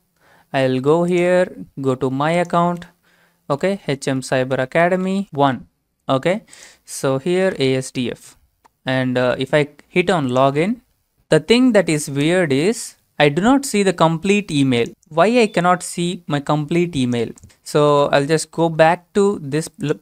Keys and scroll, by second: 3.2-5.7 typing, 7.1-8.2 typing, 17.4 alt+Tab, 18.2 alt+Tab, 18.8 alt+shift+Tab.